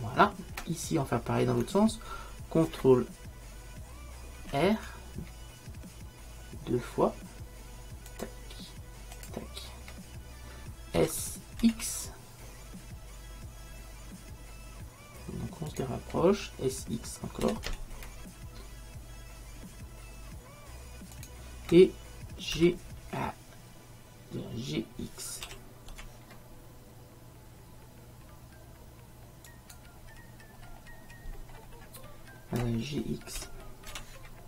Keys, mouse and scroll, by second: 4.4 ctrl+r, 11.1 s, 17.5 s, 22.6 d, 25.5 g, 30.7-33.6 middle drag, 33.5 g.